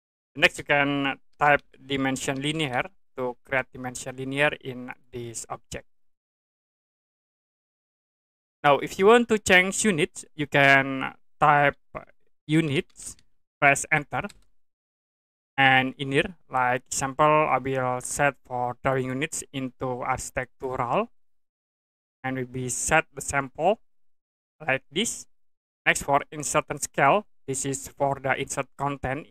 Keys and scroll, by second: 0.5-3.4 typing, 12.3-13.6 typing, 14.2 Return.